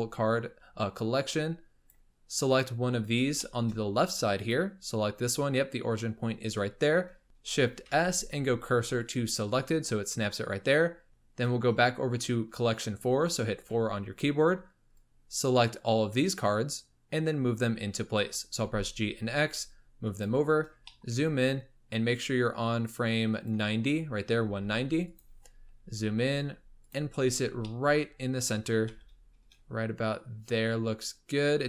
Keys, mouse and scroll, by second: 1.2-2.5 drag, 2.8-3.2 scroll up 8, 3.3-3.7 shift+middle drag, 3.7-4.3 scroll up 3, 4.3 click, 5.2-7.2 scroll up 1, 7.2 shift+s, 7.8 shift+s, 11.1-12.0 scroll down 5, 13.7 4, 14.9 click, 17.0-18.4 scroll up 4, 18.5 g, 20.5-20.8 scroll up 2, 20.8-21.2 shift+middle drag, 21.2-21.6 scroll up 5, 22.2 click, 23.8-24.3 scroll down 9, 24.3 g, 25.4-25.8 scroll up 7, 25.8 g, 27.1-27.6 scroll up 9, 27.6-28.1 shift+middle drag, 28.2-28.9 scroll up 5, 28.9 g.